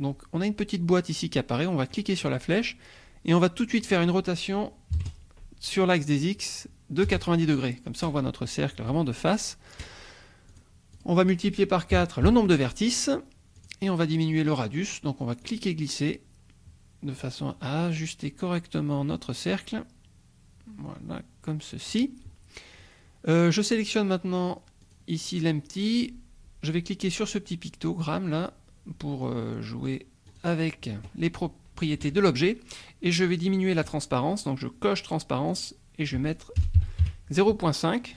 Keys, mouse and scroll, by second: 1.9 click, 3.8 click, 5.0 KP_0, 7.1 Return, 10.6-11.9 drag, 12.2 KP_4, 13.6 click, 15.4-22.1 drag, 24.8 click, 30.3 click, 33.8 click, 35.5-36.6 drag, 36.6 KP_0, 36.8 KP_Decimal, 37.0 KP_5.